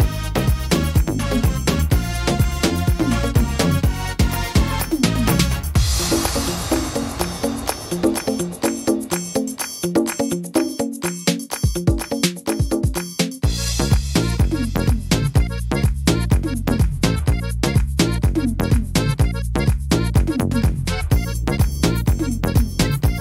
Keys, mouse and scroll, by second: 4.8 click, 6.5 middle click, 9.0 scroll down 2, 9.4 middle click, 9.8-10.3 scroll down 3, 10.3 middle click, 10.7 scroll up 1, 11.0 shift+middle click, 11.4-12.3 scroll up 7, 12.2 middle click, 12.8 middle click, 13.9 c, 15.5 middle click, 16.0 c, 17.9 middle click, 18.5 middle click, 19.4 s, 21.9 click.